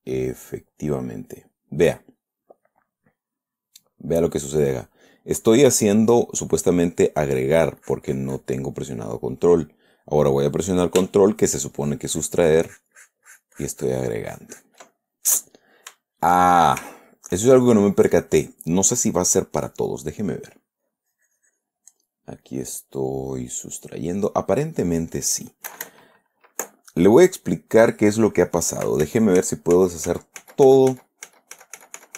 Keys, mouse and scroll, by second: 7.7-9.0 drag, 12.2-16.1 ctrl+drag, 15.2 ctrl+middle click, 15.4 ctrl+right click, 16.3-17.8 shift+middle drag, 17.9 shift+middle click, 18.8 click, 20.7 click, 21.2-22.2 drag, 23.0-25.1 middle drag, 29.5 ctrl+z.